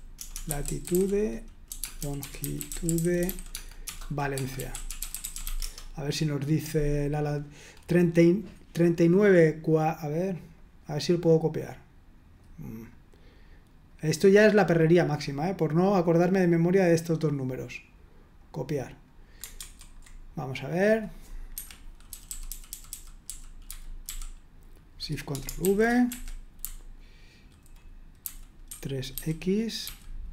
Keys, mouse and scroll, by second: 0.0-5.9 typing, 10.5-12.4 drag, 12.8 click, 13.3 click, 13.9 click, 15.1 click, 15.8-17.5 drag, 19.7 super+1, 20.8 click, 21.6 Escape, 21.8-24.5 typing, 25.6 ctrl+v, 26.1 Escape, 26.6-30.3 typing.